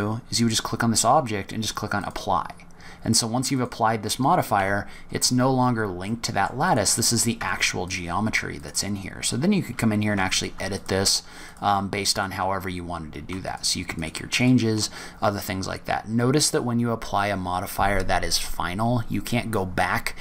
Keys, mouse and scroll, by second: 1.9 click, 3.5 click, 4.5 Delete, 5.3-6.1 scroll up 5, 6.0 middle click, 6.6 click, 7.3 Tab, 7.8 click, 8.5 click, 8.9-9.6 scroll up 5, 10.1 3, 10.3 click, 10.6 shift+click, 11.0 click, 11.3 click, 12.1 click, 13.7 shift+click, 13.8 shift+click, 14.3 shift+click, 15.0 scroll down 3, 15.9-16.3 scroll down 3.